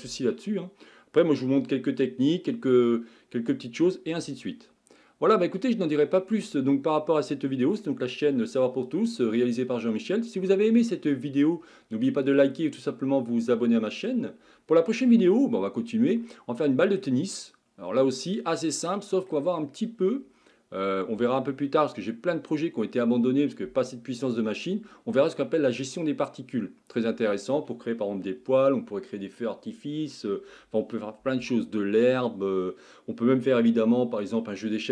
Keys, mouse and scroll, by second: 5.6 click, 6.5-34.9 middle drag.